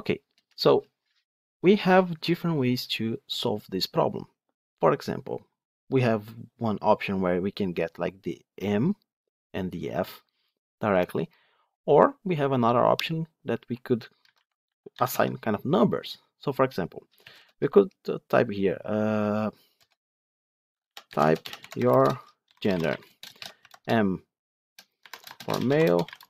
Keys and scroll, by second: 15.0 Tab.